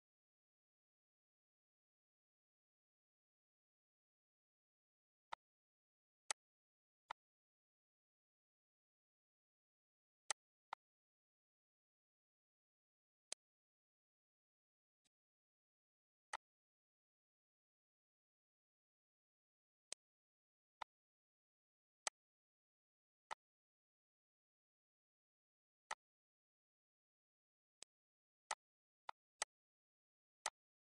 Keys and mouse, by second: 13.5 click, 15.0 click, 16.5 click, 20.1 click, 21.0 click, 22.3 click, 23.5 click, 26.1 click, 28.0 click, 28.7 click, 30.6 click.